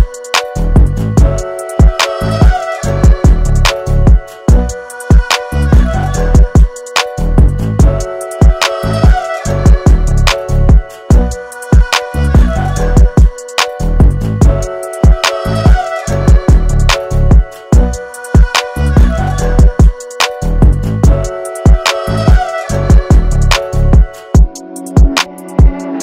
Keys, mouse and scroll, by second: 3.4 alt+scroll up 1, 3.8 space, 3.9 click, 4.5 alt+scroll up 1, 4.8 space, 5.0 click, 5.7 alt+scroll down 1, 6.1 space, 6.1 click, 6.6 space, 8.9 f, 9.4 space, 9.6 click, 9.9 space, 12.6 click, 15.4-21.5 drag, 22.1-26.0 drag.